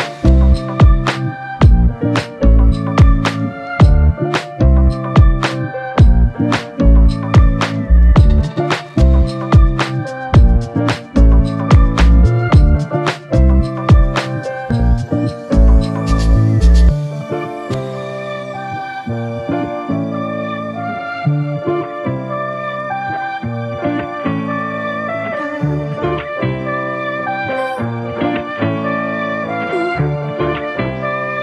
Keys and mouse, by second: 6.4 alt+m, 8.6 alt+click, 13.6-14.0 typing, 20.2 typing, 23.1 alt+shift+click, 24.9 f, 26.6 double click.